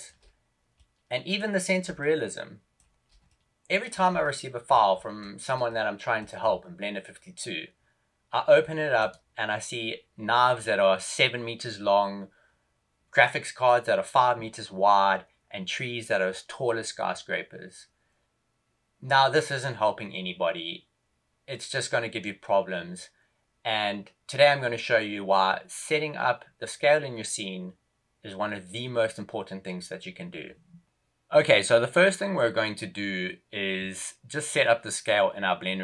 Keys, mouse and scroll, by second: 0.7 middle click, 1.9 shift+middle click, 3.2 middle click, 4.2 shift+middle click, 4.9 shift+middle click, 5.6 middle click, 8.9 right click.